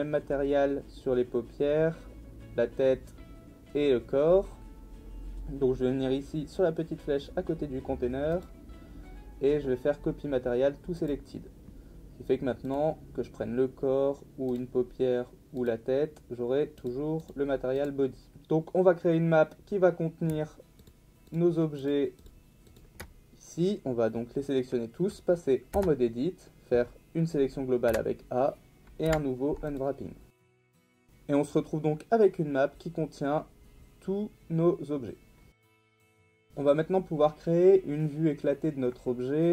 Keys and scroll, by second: 25.7 Tab, 27.9 a, 29.1 u, 35.8 Tab.